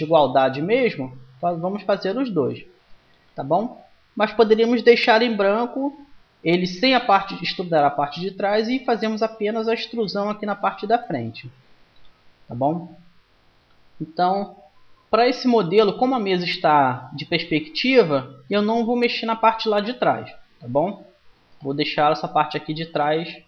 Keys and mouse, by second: 1.2 KP_1, 2.9 ctrl+z, 9.5-11.4 right drag, 12.7-21.5 middle drag.